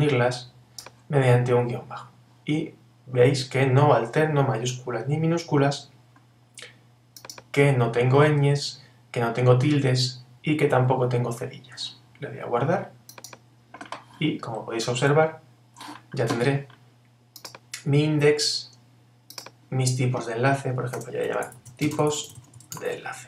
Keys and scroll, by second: 21.0 shift+t.